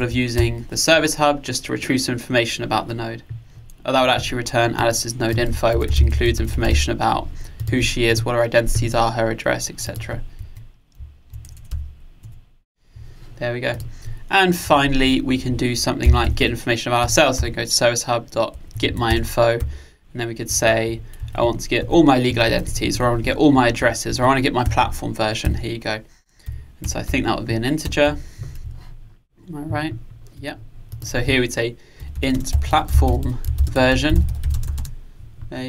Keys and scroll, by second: 12.3 Return, 17.0 Return, 24.7 Return.